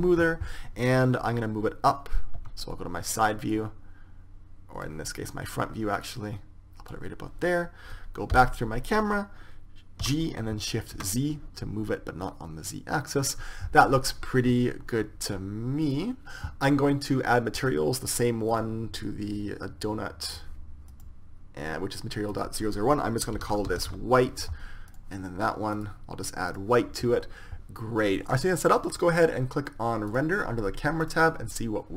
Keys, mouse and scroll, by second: 3.3 KP_1, 4.3 click, 5.2 click, 6.8-8.7 drag, 9.1 KP_0, 10.8 g, 19.3-21.2 drag, 21.7-23.4 right drag, 23.1-25.0 drag, 25.7 right click, 26.5 middle click, 27.4-30.2 drag, 30.9-31.9 drag.